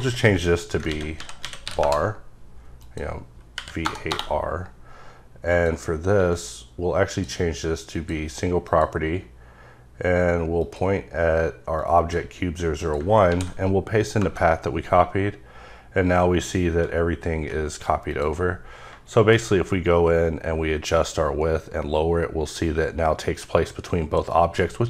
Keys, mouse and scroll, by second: 0.9 ctrl+a, 1.1-1.6 typing, 1.8 KP_Enter, 2.8 click, 3.5 Right, 3.8 BackSpace, 4.1 Return, 5.5 click, 7.0 click, 7.9 click, 8.6 click, 10.6 click, 11.8 click, 12.8 click, 13.3 ctrl+v, 14.2 KP_Enter, 18.1 click, 19.7-24.3 drag.